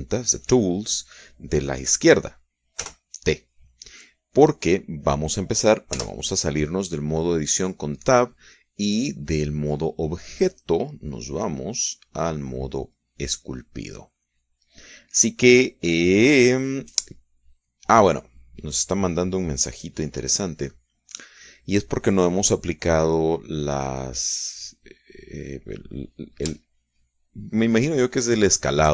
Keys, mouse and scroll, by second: 3.8 t, 6.9 Tab, 12.3 click, 13.9 click, 20.5 click, 20.9 click, 27.6-28.9 shift+middle drag.